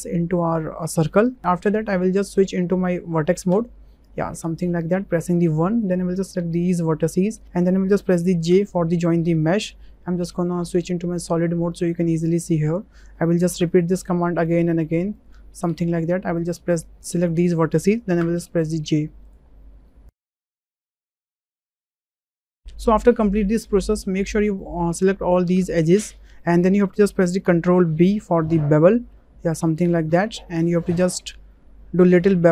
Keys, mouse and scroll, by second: 3.5 1, 5.8 click, 8.5 j, 10.8 click, 11.8 click, 13.6 j, 15.7 j, 18.2 j, 20.0 shift+click, 20.3-22.4 typing, 22.6 ctrl+z, 24.6 click, 28.0 ctrl+b.